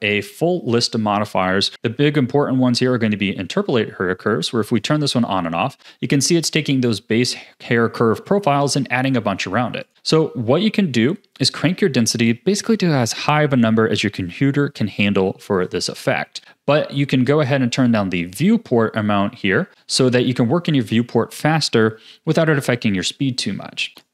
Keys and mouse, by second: 4.6 click, 9.9 click, 17.3-19.7 drag, 19.9 a, 23.8 click.